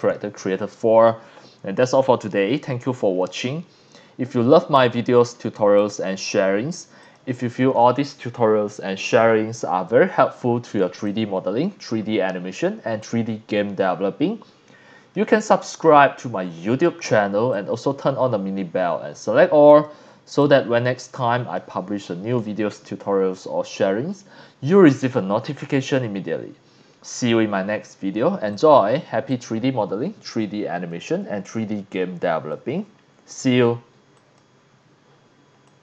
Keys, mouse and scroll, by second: 0.0 click, 5.2 click, 5.8 click, 7.0 click, 9.3-9.8 scroll up 4, 9.8 scroll down 2, 10.4 scroll up 2, 11.1 click, 12.4 scroll down 2, 13.0-15.1 drag, 17.5-19.8 drag, 20.4-21.5 drag, 28.5 click, 30.8-31.1 scroll down 2, 31.5-32.5 drag, 34.1 click, 35.6 click.